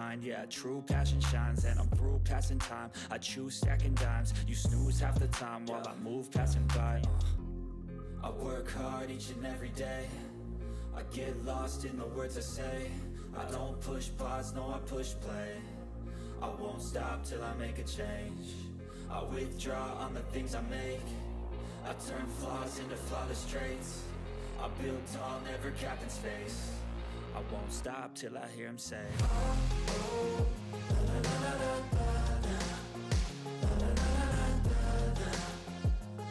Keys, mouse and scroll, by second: 1.1 click, 1.4-4.2 typing, 2.9 click, 5.1 click, 6.9 space, 8.6-10.6 typing, 11.1-16.6 drag, 18.4-19.7 typing, 20.3 click, 21.2-23.1 typing, 23.8 click, 24.1 ctrl+s, 24.4 click, 26.1 click, 26.9 5, 28.8 click, 29.9 8, 31.2 click, 32.1 4, 34.4 4, 34.7 ctrl+5, 34.8 ctrl+s.